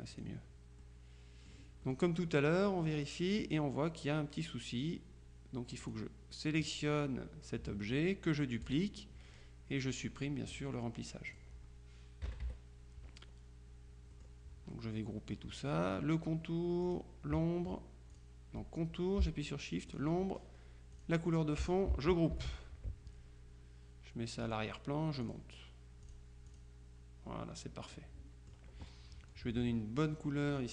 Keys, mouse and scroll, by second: 0.9-2.7 drag, 2.9 middle click, 5.9 click, 8.7 click, 11.4 click, 12.3 KP_Subtract, 14.2 click, 15.0 click, 16.9 click, 18.2 click, 20.0 shift+click, 21.0 click, 22.4 ctrl+g, 24.5 click, 25.3 click, 26.1 click, 28.0-29.1 drag, 30.1 click.